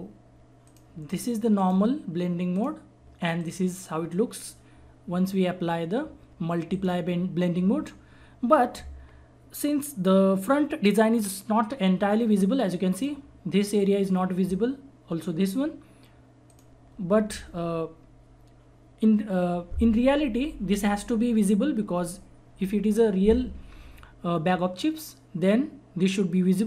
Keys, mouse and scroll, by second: 0.6 click, 6.7 click, 13.0-16.5 drag.